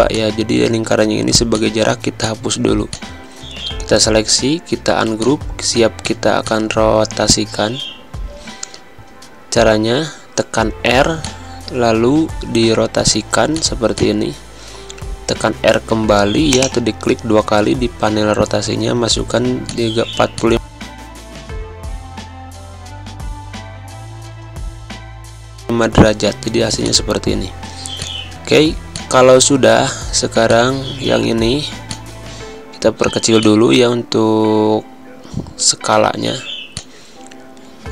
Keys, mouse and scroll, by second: 0.8 Delete, 1.5 click, 4.0 ctrl+g, 5.1 click, 6.1 space, 6.4 click, 6.5 space, 7.5 v, 9.7 v, 11.2 click, 16.5 click, 28.3 click, 28.7 space, 28.9 click, 29.1 space, 30.4 click, 33.3 click, 34.1 space, 34.3 click, 35.2 v, 36.7 click.